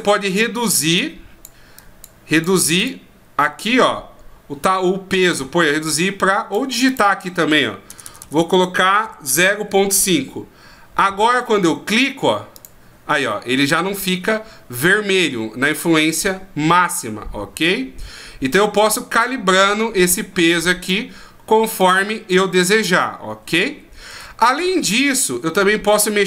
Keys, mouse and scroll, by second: 1.8 click, 3.6 click, 6.9 click, 8.0 BackSpace, 8.2 BackSpace, 12.5 click, 13.3 middle click, 20.2 click, 21.8 click, 23.7 ctrl+z, 24.1 ctrl+z, 24.8 ctrl+z.